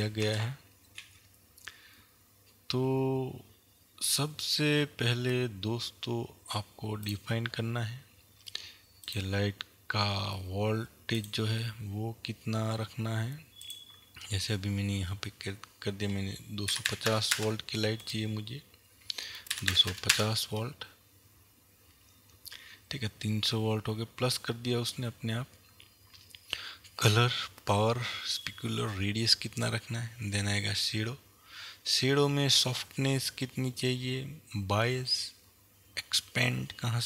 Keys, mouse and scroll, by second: 0.3 click, 1.4 g, 7.7 click, 9.5-10.9 drag, 11.9 click, 14.1-15.1 drag, 17.3 KP_2, 17.7 KP_0, 18.2 KP_Enter, 31.1-32.9 scroll down 1.